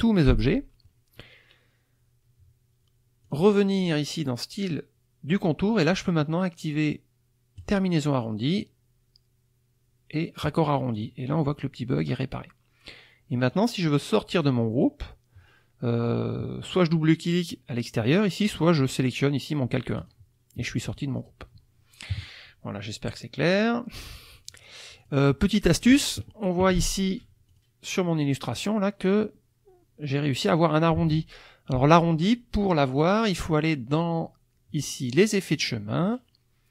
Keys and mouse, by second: 3.3 click, 7.6 click, 10.4 click, 10.9 click, 13.5-14.6 drag, 20.0 click, 20.9-21.4 drag, 22.1 KP_Subtract, 23.6 click, 24.1 click, 24.5 click, 25.0 click, 25.3 middle click, 25.4 click, 27.5 click, 28.7 click, 31.2 alt+Tab, 32.6 click, 32.9 click, 33.9 click, 36.0 click.